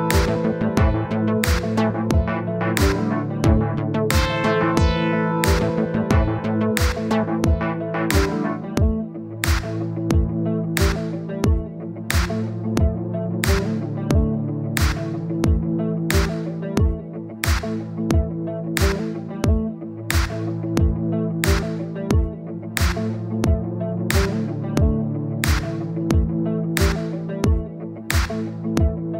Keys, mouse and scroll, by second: 3.1 middle click, 3.8-7.8 drag, 8.5 scroll down 2, 8.8 middle click, 9.3-10.0 scroll up 1, 10.0 click, 10.3 middle click, 11.2-11.6 scroll up 1, 11.6-14.0 middle drag, 14.0 KP_1, 16.0-17.4 drag, 18.5-28.2 drag, 28.3-29.1 drag.